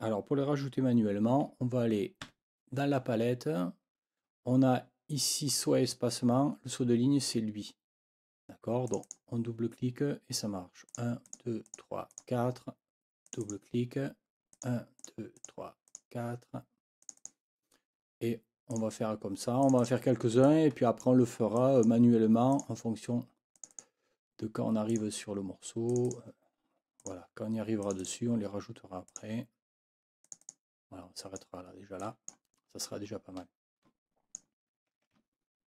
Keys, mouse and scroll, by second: 2.2 F9, 8.9 click, 10.9 click, 11.2 click, 11.6 click, 12.1 click, 13.2 click, 14.5 click, 15.0 click, 15.4 click, 15.9 click, 17.0 click, 18.7 click, 19.6 click, 20.4 click, 21.6 click, 22.5 click, 23.6 click, 24.9 click, 25.9 click, 27.0 click, 27.8 click, 29.1 click, 30.2 click, 31.2 click, 32.0 click, 33.6-34.5 scroll up 2.